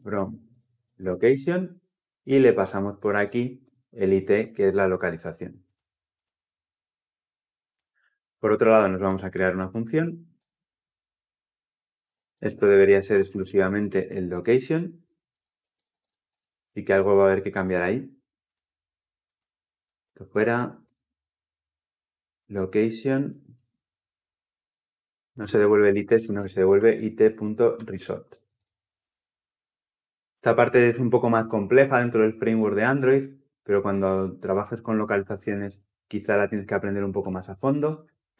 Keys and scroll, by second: 16.1 Return, 27.6 Return, 28.5 ctrl+alt+o, 35.3 Tab.